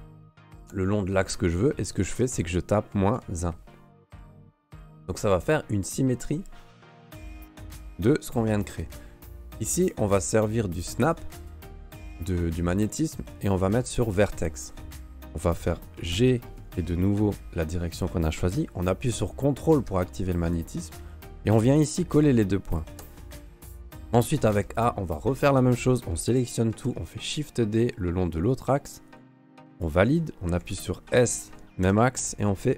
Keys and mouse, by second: 7.2 middle click, 11.1-14.6 drag, 15.5 middle click, 16.1 g, 23.5 shift+click, 23.8 middle click, 24.2 a, 24.5 a, 25.4 middle click, 26.7 shift+d, 29.7 click, 30.6 s.